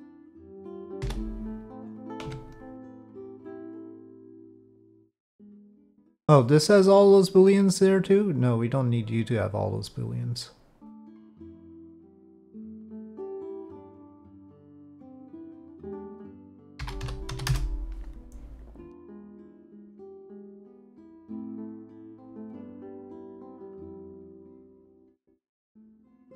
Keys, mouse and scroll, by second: 0.4 click, 1.0 p, 2.3 Tab, 3.3 click, 4.2 click, 8.9 click, 11.1 click, 12.4-14.6 drag, 15.8 click, 16.2 middle click, 16.2-18.3 drag, 20.0-20.8 middle drag, 21.5-22.7 middle drag, 22.7 click, 24.6-25.4 drag.